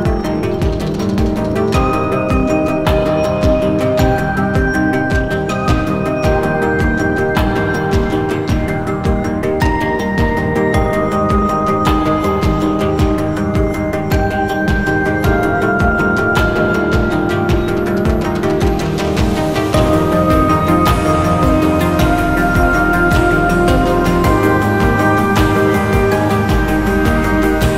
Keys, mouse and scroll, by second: 0.6-1.3 scroll up 1, 1.3 alt+scroll up 1, 1.4 alt+click, 2.0 scroll down 1, 2.2-2.6 scroll up 2, 2.7 alt+click, 5.6-6.2 scroll up 1, 6.2-6.7 scroll down 1, 8.1 scroll up 1, 8.2 alt+click, 21.0 scroll up 1, 21.2-21.7 scroll down 1, 22.0 ctrl+s, 23.6 alt+scroll down 1, 23.8 alt+click.